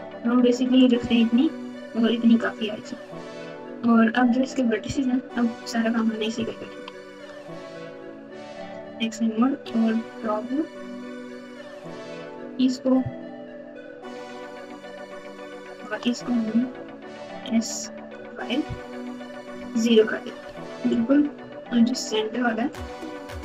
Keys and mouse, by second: 3.3 Tab, 3.7 Tab, 5.3-5.9 ctrl+KP_8, 6.3 KP_6, 6.5 KP_6, 6.7 KP_6, 7.6 Tab, 7.9 Tab, 8.5 alt+z, 9.6 1, 12.0 click, 15.0 shift+click, 16.7 s, 23.3 click.